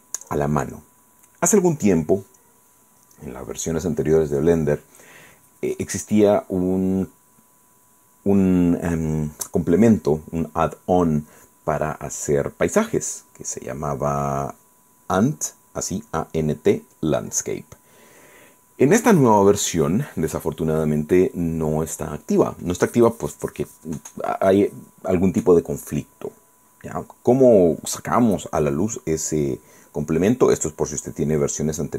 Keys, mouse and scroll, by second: 1.5 scroll down 2, 2.2 scroll up 2, 2.7 scroll down 1.